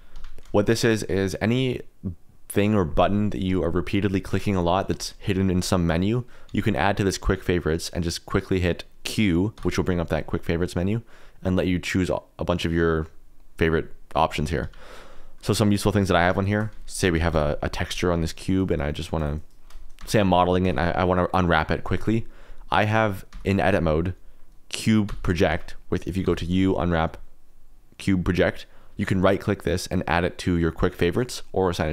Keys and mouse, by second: 6.4 q, 9.5 q, 16.4 shift+middle click, 17.1 ctrl+l, 18.2 click, 18.5 KP_Decimal, 19.1 click, 19.3 KP_Decimal, 19.6 middle click, 20.2 Tab, 20.2 middle click, 20.6 Tab, 23.3 Tab, 25.0 q, 26.2 u.